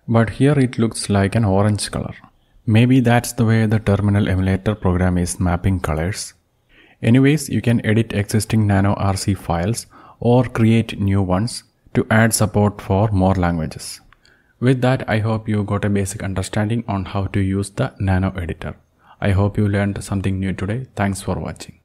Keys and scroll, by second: 0.4 alt+Down, 0.5-1.5 alt+Down, 2.0 alt+Up, 2.5 alt+Up, 2.6-4.3 alt+Up, 6.1 ctrl+x.